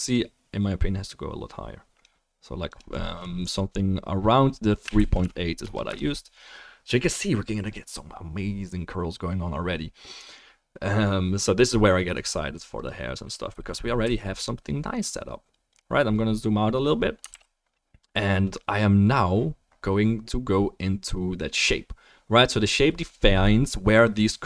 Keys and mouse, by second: 6.1-12.8 middle drag, 12.8-14.1 right drag, 14.0 g, 14.1-15.8 drag, 17.3 ctrl+s, 17.4-24.4 right drag, 18.5 middle click.